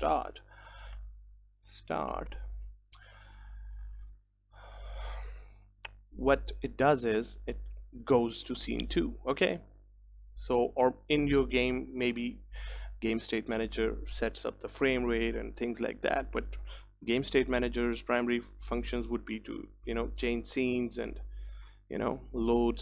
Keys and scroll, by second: 13.5 ctrl+s.